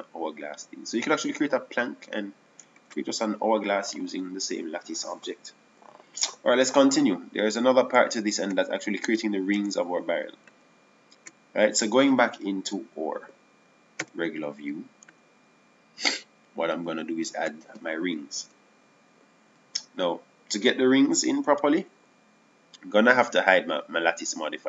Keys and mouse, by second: 4.6 ctrl+z, 10.9 Tab, 11.1 Tab, 16.5 z, 20.3 KP_7.